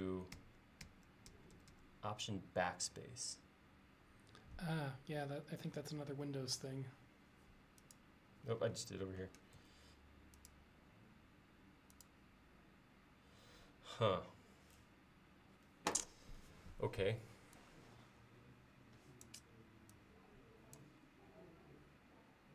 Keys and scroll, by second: 6.6 l, 9.7 l.